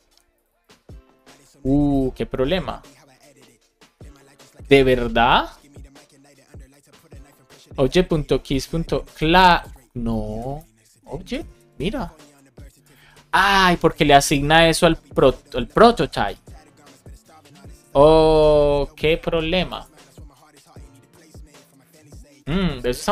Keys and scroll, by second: 10.2 shift+super+Left, 10.5 BackSpace.